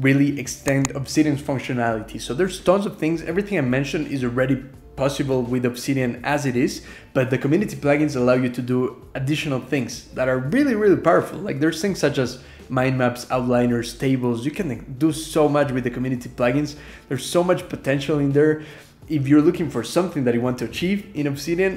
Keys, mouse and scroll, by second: 1.6 scroll up 2, 2.2 ctrl+g, 3.0 ctrl+r, 3.2 ctrl+shift+h, 3.5 ctrl+,, 4.8 k, 5.0 Up, 5.5 ctrl+,, 5.9 k, 17.0 alt+\, 17.3 Escape, 17.3 j, 17.4 alt+a, 18.0 1, 19.2-20.8 typing.